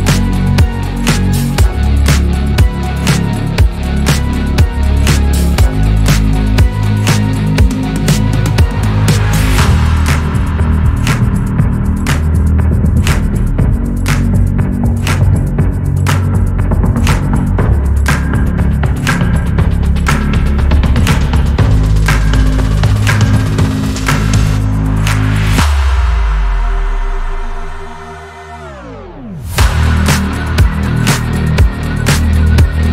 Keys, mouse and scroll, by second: 4.4-4.8 scroll down 1, 4.8-6.0 middle drag, 6.0-8.4 scroll up 3, 9.2 alt+click, 10.1 s, 13.0 click, 13.5 scroll down 2, 13.7 Tab, 14.0-16.1 middle drag, 16.1 Tab, 16.4-16.7 middle drag, 16.7-17.7 scroll up 1, 17.7 alt+click, 19.0 2, 19.4 alt+click, 20.4 s, 21.6 middle click, 22.5-23.6 scroll up 1, 23.6 alt+click, 24.5 s, 29.1-29.9 middle drag, 29.9 Tab, 31.0 click, 32.1 Tab, 32.5 click.